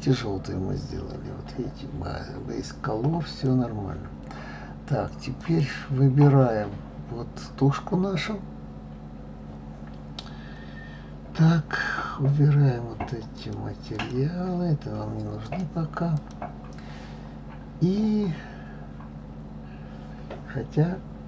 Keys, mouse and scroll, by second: 0.0 click, 3.3 click, 5.4 click, 13.3-15.5 drag, 16.1 click.